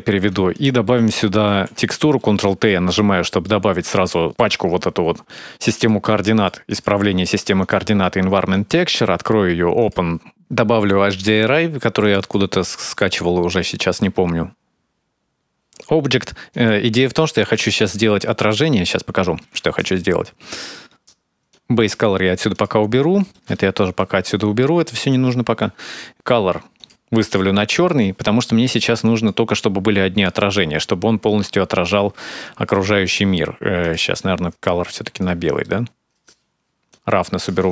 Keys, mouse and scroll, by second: 0.3 click, 1.5 ctrl+t, 2.0 middle click, 3.3 click, 4.2 click, 5.5 click, 6.1 click, 6.5 click, 7.4 click, 8.3 click, 12.1 middle click, 13.8-14.1 scroll up 3, 14.1-14.7 scroll down 2, 14.7 click, 15.8 scroll down 2, 16.3 right click, 17.3 middle click, 19.1-20.3 scroll up 5, 21.3 click, 22.3 click, 23.1 middle click, 23.3 middle click, 24.0 scroll up 2, 24.9 click, 25.4 middle click, 26.1 click, 26.6 click, 27.9 middle click, 28.8 click, 29.4 click, 32.2 middle click, 33.6 click, 35.4 middle click, 36.7 click, 37.5 middle click.